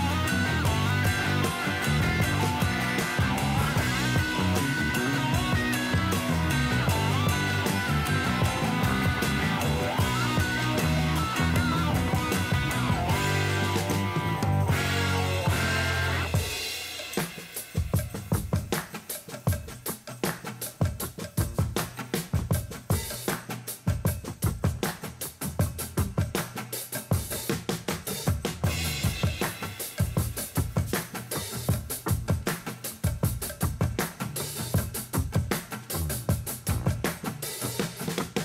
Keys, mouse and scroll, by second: 1.9 click, 3.1 click, 4.2 click, 4.9 click, 5.5-7.6 drag, 9.2 click, 10.2 click, 10.6 click, 10.9 click, 11.1 click, 11.4-12.1 drag, 12.7 click, 13.9 click, 14.2 click, 14.6 click, 15.1 click, 15.3-16.1 drag, 16.7 click, 17.5 click, 17.7 click, 18.1 click, 18.4 click, 18.7-19.3 drag, 19.9 click, 22.2 click, 24.0 click, 27.7 click, 28.7 click, 31.2-34.2 drag, 34.6-38.4 drag.